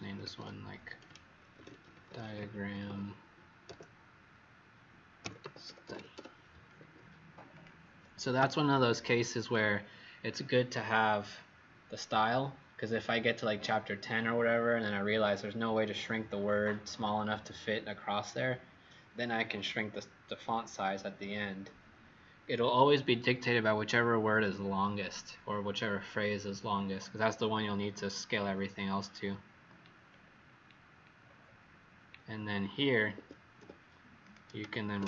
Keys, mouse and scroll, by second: 0.2 ctrl+a, 1.3-3.6 typing, 5.1 Return, 5.1-6.6 typing, 6.8 Escape, 7.5 click, 8.3 z, 8.9 click, 30.0-30.6 alt+scroll down 3, 31.2-31.7 alt+scroll down 2, 33.1 Escape, 33.5 v, 34.2 click.